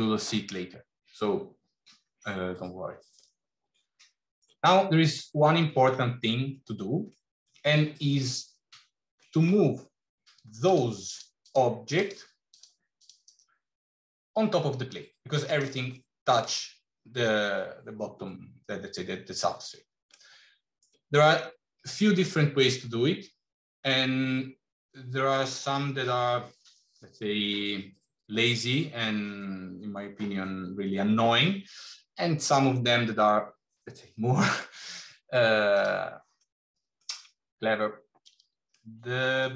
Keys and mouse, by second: 3.3 middle click, 5.2 middle click, 6.9-8.1 middle drag, 9.3 middle click, 10.9 click, 11.8 click, 12.3 click, 13.1 click, 15.4 click, 15.8 middle click, 20.0-20.7 middle drag, 36.3 middle click, 38.7 middle click.